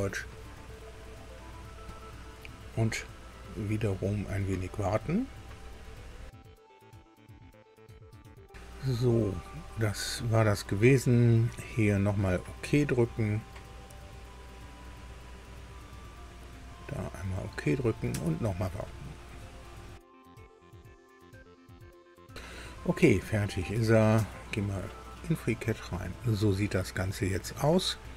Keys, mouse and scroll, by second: 1.9 click, 7.5 alt+Tab, 16.1 click, 16.9 click, 18.1 alt+Tab, 24.2 alt+Tab, 25.5-27.5 drag, 27.9 scroll up 1.